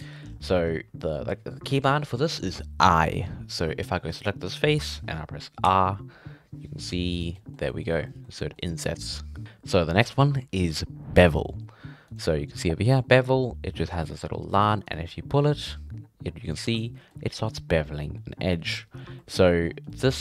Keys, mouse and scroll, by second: 0.0 middle click, 0.2-1.0 scroll up 6, 1.0-4.0 shift+middle drag, 4.1 right click, 7.3-8.9 middle drag, 8.9-9.4 scroll up 1, 12.1-15.0 drag, 16.7 scroll up 1, 16.8-18.9 middle drag, 18.9 scroll down 2, 19.2 middle click, 19.4-19.9 shift+scroll up 4, 19.5 shift+middle click, 19.9-20.2 middle drag.